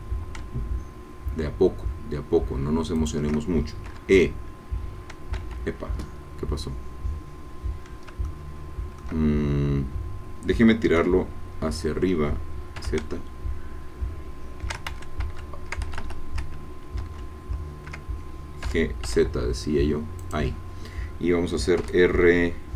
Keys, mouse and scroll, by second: 3.0 shift+click, 3.9 e, 5.3 Escape, 8.2-9.5 shift+drag, 11.0 g, 12.8 z, 14.9 ctrl+shift+z, 15.9 ctrl+Escape, 17.2 ctrl+z, 18.6 g, 19.0 z, 20.2 click, 21.8 r.